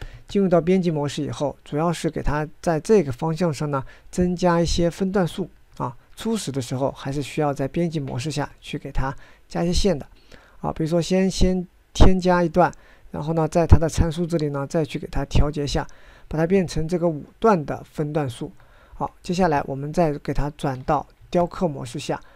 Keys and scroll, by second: 19.8 ctrl+Tab, 20.3 ctrl+Tab, 20.4 ctrl+Tab, 20.5 ctrl+Tab, 20.6 ctrl+Tab.